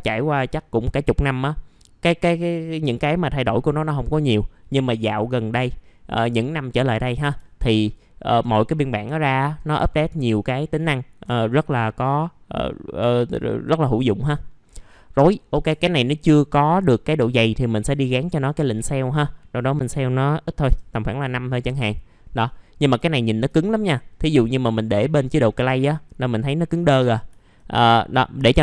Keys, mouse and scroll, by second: 7.4 alt+middle click, 8.6-9.0 scroll down 1, 9.1 alt+middle click, 10.3-11.2 scroll up 1, 11.4-13.3 alt+middle drag, 13.4 alt+middle click, 14.6-15.1 scroll down 1, 15.1-15.7 scroll up 1, 15.7 F4, 17.6 click, 20.9 middle click, 21.6 F4, 22.1 scroll down 1, 22.4 alt+middle click, 23.0 alt+middle click, 24.3 click, 25.4 scroll down 1, 25.7 alt+middle click, 26.1 scroll up 1, 27.3 alt+middle click.